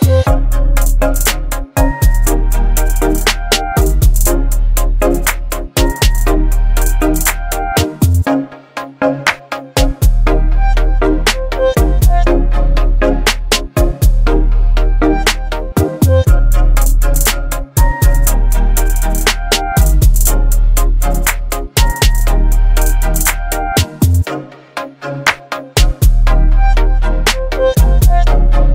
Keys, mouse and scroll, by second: 0.0-0.4 typing, 2.9 click, 6.0-9.8 shift+drag, 16.8 v, 17.0 ctrl+t, 18.7-19.9 alt+drag, 20.4 Return, 22.0-24.2 alt+drag, 25.5-26.2 ctrl+drag, 27.2-28.5 drag.